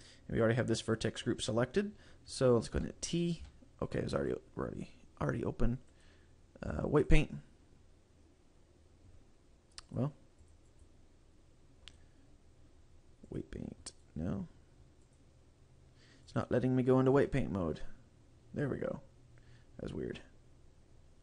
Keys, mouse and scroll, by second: 3.5 t, 4.4 click, 6.0 click, 9.9 click, 10.5 click, 10.7 click, 12.0 click, 14.1 right click, 15.1 click, 16.3 click, 20.0-20.4 scroll down 2.